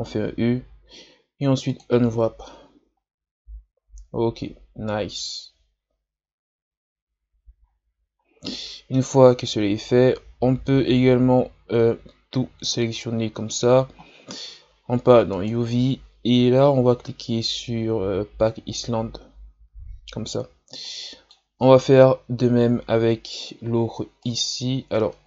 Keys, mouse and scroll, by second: 0.3 u, 3.0-4.3 scroll up 1, 5.5 scroll up 1, 6.2-7.1 scroll up 2, 7.7-8.4 scroll down 7, 8.5-11.5 middle drag, 13.0 a, 13.3 a, 15.3-20.8 drag, 20.8-22.4 middle drag, 22.4 KP_Divide, 24.2 right click, 25.0 Tab.